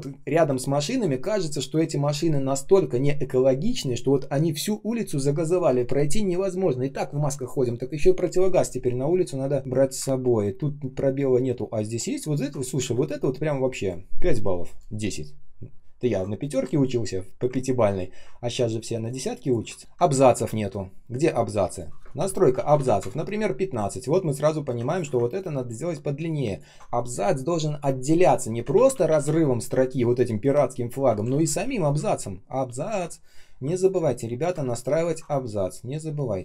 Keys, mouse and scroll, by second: 10.0 ctrl+scroll up 1, 10.8 ctrl+scroll down 1, 11.3 ctrl+scroll up 1, 12.2 ctrl+scroll down 1, 12.7 r, 17.7 ctrl+z, 18.5 space, 19.0 space, 19.0 space, 19.7 ctrl+scroll up 1, 19.8-20.1 ctrl+scroll down 1, 20.1 ctrl+click, 22.5 ctrl+a, 22.6 typing, 22.9 Return, 24.8 ctrl+click, 25.3 ctrl+click, 28.6 ctrl+z, 31.2 ctrl+shift+z, 33.0 ctrl+scroll down 1, 33.9 space, 34.4 space, 34.5 ctrl+scroll up 1, 35.0 ctrl+click, 35.6 ctrl+click.